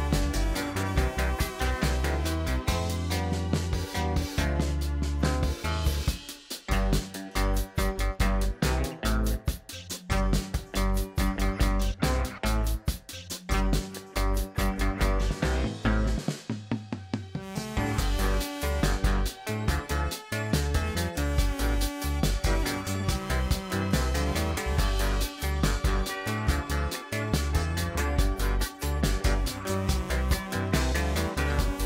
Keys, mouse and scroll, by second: 2.7 alt+shift+click, 3.3 middle click, 3.6-3.9 scroll down 1, 3.9-4.8 shift+middle drag, 4.8-6.5 scroll up 1, 6.5 e, 12.3-13.7 middle drag, 13.7-14.9 scroll down 2, 14.9 Tab, 15.1 click, 15.4-15.9 middle drag, 15.9-16.6 scroll down 3, 16.6-17.7 shift+middle drag, 17.7-20.2 scroll up 12, 19.2 click, 20.2 scroll up 1, 20.5 Tab, 21.4 2, 22.3 alt+click, 23.1-24.4 middle drag, 24.4 click, 25.0 alt+click, 27.5-29.7 right drag, 29.7-30.3 scroll down 4, 30.3 middle click, 31.1 scroll down 1, 31.3-31.8 shift+middle drag.